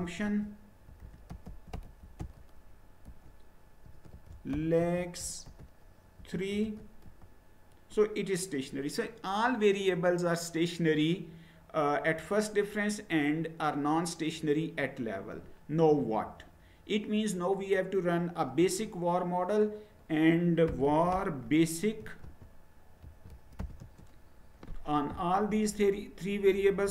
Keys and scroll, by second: 0.0-6.6 typing, 7.1 Return, 20.6-24.1 typing.